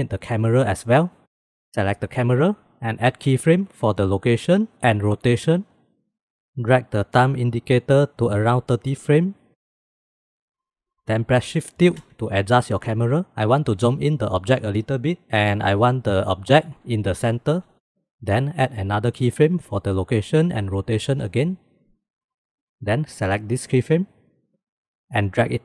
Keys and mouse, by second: 3.1-4.5 drag, 5.1 click, 6.0 middle click, 7.0-10.3 middle drag, 11.8 shift+`, 19.3-20.4 drag, 21.3 click, 23.2 click, 23.8-24.1 drag, 25.3-25.6 drag.